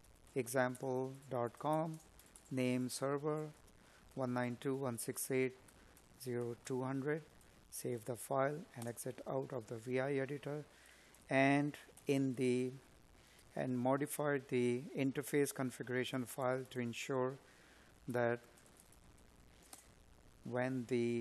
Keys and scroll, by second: 2.4 Escape, 6.6 space, 12.2 Tab, 14.4 Tab, 19.5 space.